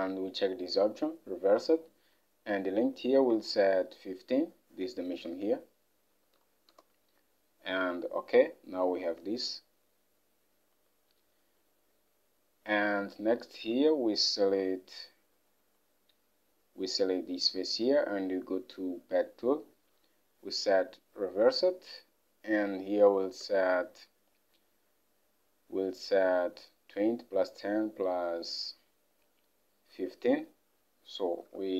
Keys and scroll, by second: 3.3 alt+Tab, 6.3-8.5 typing, 6.8 Return, 9.1 alt+Tab, 23.3 alt+Tab, 30.2 alt+Tab, 31.3-31.7 typing.